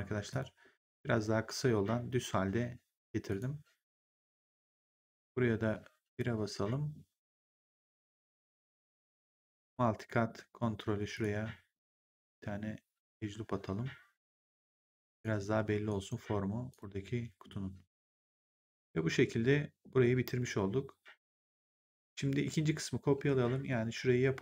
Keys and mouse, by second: 0.2 click, 3.2 click, 4.6 click, 6.0 1, 9.5 click, 15.0 ctrl+click, 15.5 w, 15.8 right click, 16.1 3, 16.6 click, 21.5 click, 23.6 middle click.